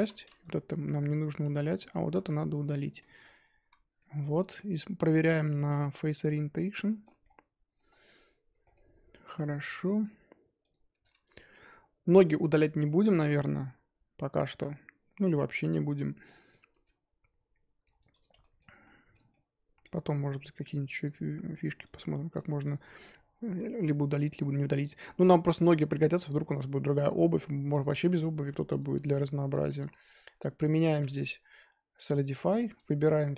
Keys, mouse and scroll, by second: 1.2 ctrl+click, 1.5-2.9 middle drag, 2.9 x, 3.2 Tab, 3.6 z, 3.9-6.0 middle drag, 6.0 drag, 6.3-6.8 scroll down 7, 6.9 middle click, 7.8-8.7 scroll up 11, 8.7 middle click, 9.6 scroll up 3, 9.9-10.7 scroll down 1, 10.7 click, 10.9 Tab, 11.2 z, 12.2 scroll down 1, 12.2-12.8 middle drag, 12.8 z, 13.1-13.4 middle drag, 13.4 z, 14.6-16.7 middle drag, 16.7 Tab, 16.9-17.2 scroll down 1, 17.8-18.1 scroll down 1, 18.1 click, 18.4-18.8 shift+middle drag, 18.8 z, 19.1-19.8 middle drag, 19.8 click, 21.8-25.6 drag, 25.6-28.8 middle drag, 28.8 click, 29.5 Tab, 30.0-30.4 shift+middle drag, 30.4 scroll up 1, 30.6 middle click, 30.9 3, 32.2 alt+click.